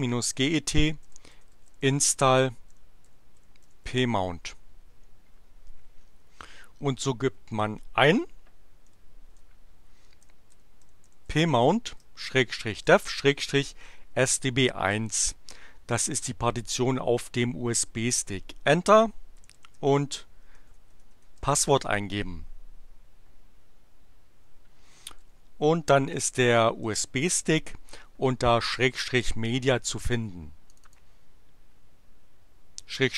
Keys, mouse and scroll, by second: 0.0-4.5 typing, 7.4 BackSpace, 10.0-14.6 typing, 17.9 Return, 19.2-21.6 typing, 24.9-26.7 typing, 30.7 click.